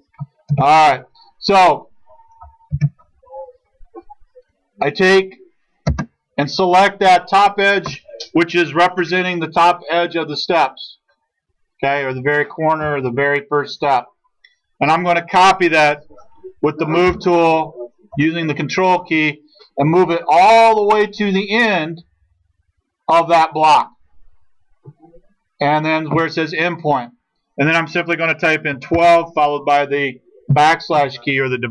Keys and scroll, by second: 0.5 ctrl+z, 2.8 ctrl+z, 5.9 space, 17.1 m, 28.5-29.4 typing, 30.5 /.